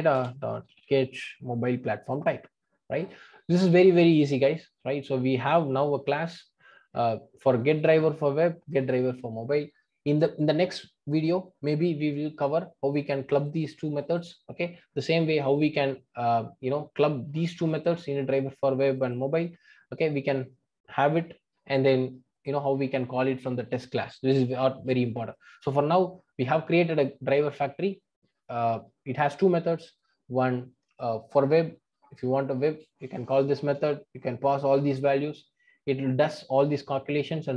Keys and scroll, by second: 0.1 Return, 2.2 Return.